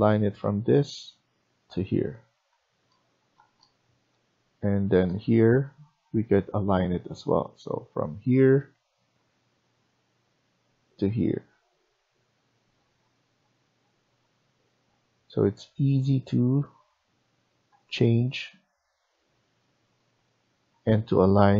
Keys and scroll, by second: 2.4 Escape.